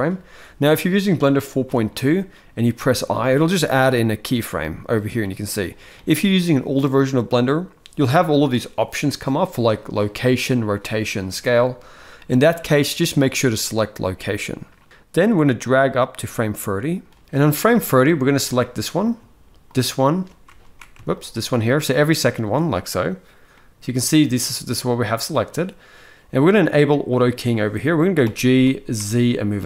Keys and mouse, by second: 5.0 middle click, 15.4-16.8 drag, 17.2-17.7 middle drag, 19.4 shift+click, 20.4 ctrl+z, 20.8 shift+click, 22.0 shift+click, 23.2-24.9 middle drag, 27.9 g.